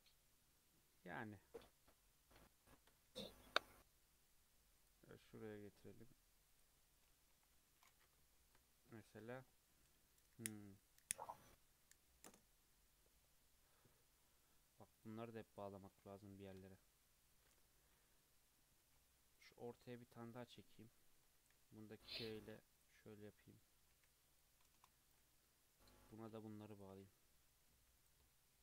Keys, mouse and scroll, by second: 0.0 scroll up 1, 0.1 Tab, 0.6 Tab, 1.4-3.1 middle drag, 3.1 ctrl+r, 7.3 KP_1, 7.5 KP_3, 8.3 shift+middle click, 8.6 scroll up 2, 9.0-12.1 shift+middle drag, 14.9 click, 15.5 click, 17.2 shift+click, 18.8 ctrl+r, 20.3 click, 22.0 k, 25.0 right click, 26.0 click, 26.7 shift+click, 27.6 j, 28.0 click.